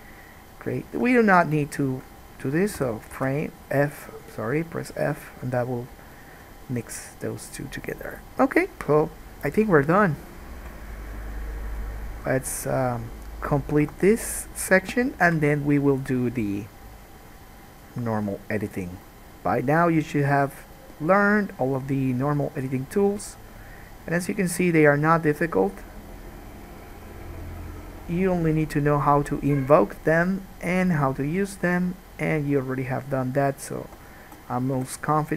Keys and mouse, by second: 1.2 3, 1.3 middle click, 1.9 shift+middle click, 3.0 f, 3.4 alt+a, 3.5-7.7 drag, 7.7-13.7 middle drag, 13.7-15.4 right drag, 14.1 1, 14.7 click, 14.7 middle click, 15.4-35.3 drag, 15.4 KP_Decimal, 34.0 2, 35.0 g.